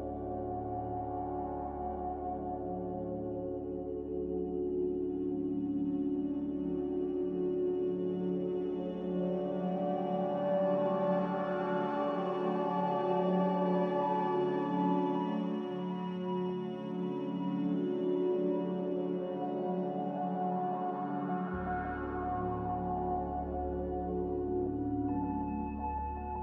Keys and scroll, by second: 19.2-19.8 typing, 25.5 g.